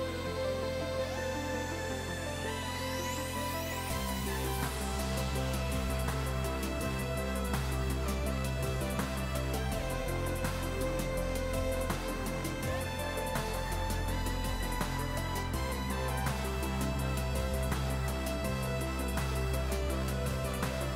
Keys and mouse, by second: 0.0-0.2 typing, 0.2 Return, 0.5 click, 1.6 click, 2.4 ctrl+z, 2.6 ctrl+1, 2.6 click, 4.8 click, 6.4 click, 8.7 click, 9.1 click, 12.9 s, 13.6 ctrl+click, 14.1 s, 14.8 ctrl+click, 15.4 KP_0, 15.5 Return, 16.6 ctrl+click, 17.1 Return, 17.3 click, 19.7 ctrl+x, 19.9 click.